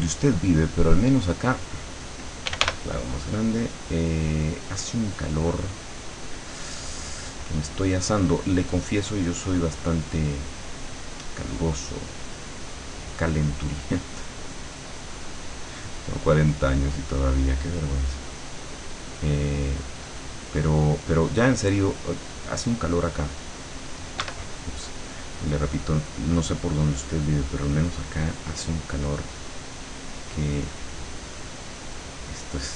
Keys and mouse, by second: 0.3 click, 2.5 f, 3.3-7.2 drag, 8.1-23.3 drag, 23.5 click, 24.3 Escape, 25.1-32.7 drag.